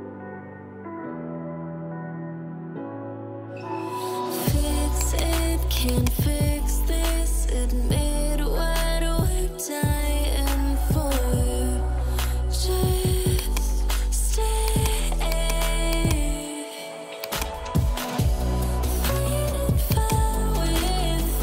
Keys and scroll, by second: 2.7 Return, 4.0 Delete, 6.4-8.1 typing, 18.9 ].